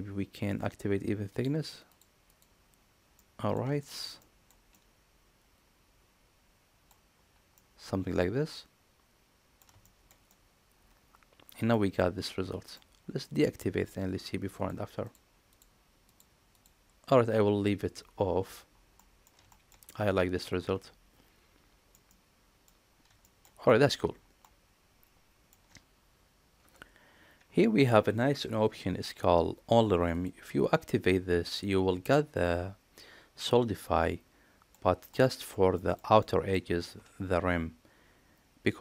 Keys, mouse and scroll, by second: 1.2 click, 1.7 click, 2.1 click, 3.0-3.4 middle drag, 3.7 shift+middle click, 4.1 middle click, 4.6-6.7 middle drag, 7.4-9.4 middle drag, 9.7 shift+middle drag, 10.2-11.6 middle drag, 12.1-12.6 middle drag, 13.1 middle click, 14.4 click, 14.9 click, 15.4 click, 15.9 click, 16.4 click, 18.8 middle drag, 19.3 shift+middle drag, 19.7-21.8 middle drag, 21.9-22.5 middle drag, 23.1 shift+middle drag, 23.5 middle click, 24.3-25.4 middle drag, 30.0 click, 31.4-34.6 middle drag, 35.0-35.3 middle drag, 35.6 shift+middle drag, 36.0-36.4 middle drag.